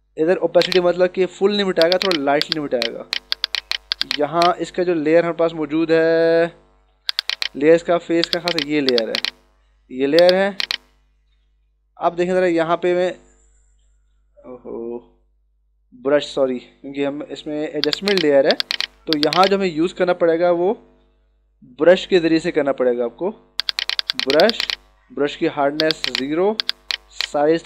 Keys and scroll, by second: 12.4 ctrl+alt+z.